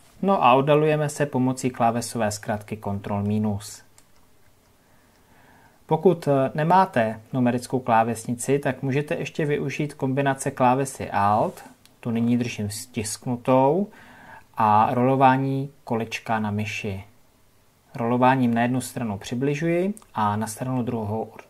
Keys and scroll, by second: 3.3 ctrl+KP_Subtract, 13.1-13.8 alt+scroll.